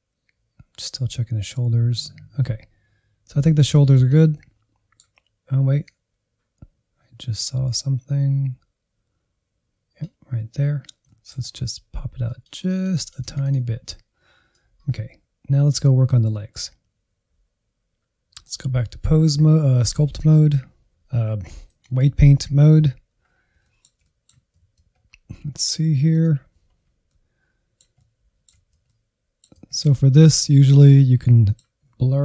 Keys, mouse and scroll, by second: 4.3-5.9 middle drag, 5.9-10.6 drag, 10.6-11.0 scroll up 1, 11.0 middle click, 11.4-12.2 scroll up 2, 12.2-13.6 drag, 13.6-14.6 scroll down 3, 14.6-17.8 drag, 17.9 shift+middle click, 18.2-21.0 drag, 21.0 scroll up 2, 21.2 shift+middle click, 21.8 alt+z, 22.1 scroll up 1, 22.3 middle click, 22.8 ctrl+click, 23.1 scroll up 1, 23.3 middle click, 24.2 alt+z, 24.4-25.6 middle drag, 25.6 scroll up 2, 25.8-26.8 middle drag, 26.8 Left, 27.1 Right, 27.2 Right, 27.4-28.0 Left, 28.4 scroll down 2, 28.5-29.8 middle drag, 29.8 click, 30.5 f, 30.8 middle click, 31.7-32.2 drag.